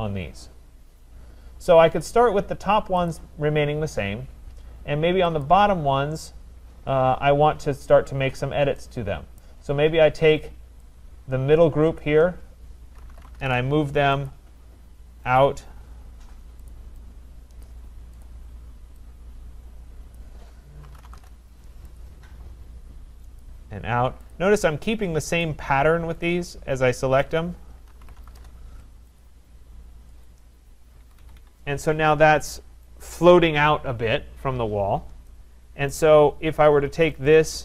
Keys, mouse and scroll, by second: 0.3-1.2 scroll, 1.2-1.9 scroll, 1.9 scroll, 3.1 click, 5.4 click, 6.2-8.0 scroll, 9.4 right click, 10.9 middle click, 12.0 click, 12.8-13.9 typing, 14.3 click, 15.3 click, 16.7 click, 17.7 click, 18.5 click, 20.2 click, 20.6-21.6 typing, 22.0 Return, 22.0 click, 23.5 click, 24.3 click, 25.4 click, 27.3 click, 27.7-28.9 typing, 29.2 click, 30.3 click, 31.0 Escape, 31.2 Escape, 31.4 Return, 31.4 Escape, 32.8 right click, 34.7-35.2 scroll, 35.9 right click, 36.1 middle click, 37.3 click.